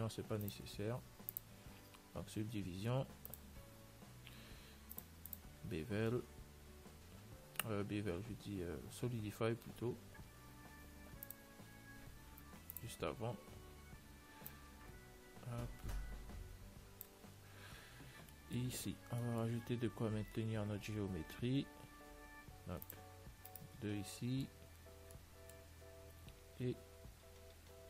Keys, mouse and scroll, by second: 0.6 ctrl+s, 1.6 click, 5.2-7.3 drag, 13.0-16.5 drag, 19.1-21.4 middle drag, 19.8 Tab, 21.6 ctrl+r, 24.3-27.4 middle drag, 26.9 ctrl+r.